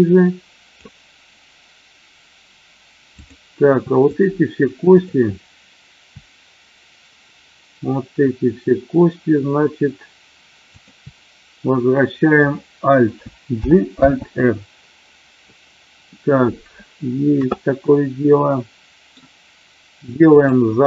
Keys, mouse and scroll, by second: 4.9 shift+click, 10.6 shift+click, 13.5 alt+g, 13.9 alt+r, 18.4 middle click, 20.1 click.